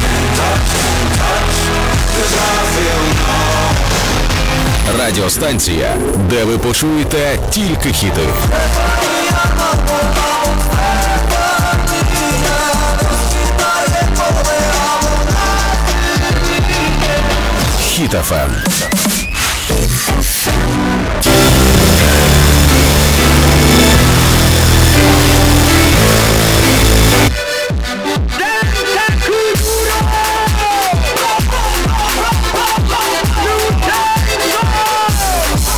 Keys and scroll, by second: 27.8 Page_Down.